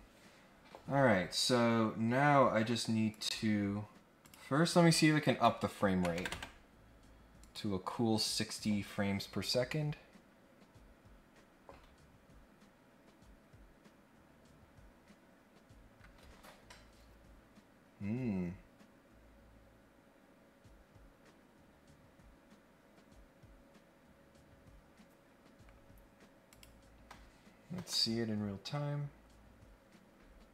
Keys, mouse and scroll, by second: 3.1 click, 4.2 click, 5.2 click, 7.4 click, 8.5 click, 26.4 click.